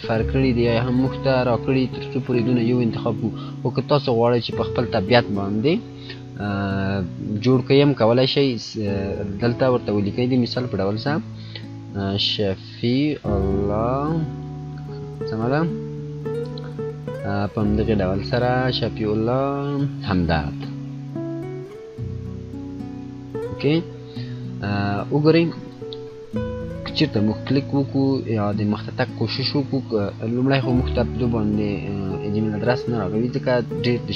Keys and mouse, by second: 8.4-11.1 drag, 11.1-14.6 typing, 20.5-23.4 typing, 28.9 click.